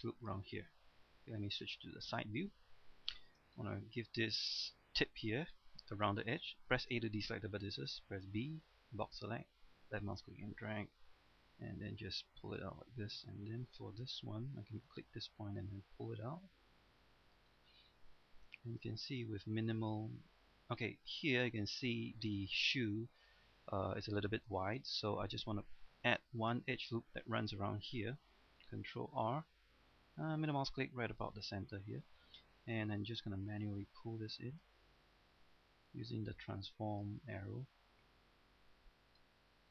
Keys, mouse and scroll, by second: 1.6 KP_3, 2.3-3.1 scroll down 1, 3.2 shift+middle click, 3.5-5.1 scroll up 1, 6.9 a, 8.3 b, 9.0-11.1 drag, 11.2 g, 12.5 click, 12.8-13.2 scroll up 1, 13.2 right click, 14.9 g, 17.2 click, 17.5-18.5 scroll down 1, 18.6-21.0 shift+middle drag, 21.0 scroll up 1, 21.2-22.2 middle drag, 22.5 shift+middle click, 24.9 middle click, 28.9 ctrl+r, 30.4-32.4 middle drag, 32.7 right click, 33.5 click, 35.1 right click, 35.9 click, 37.2-39.7 middle drag.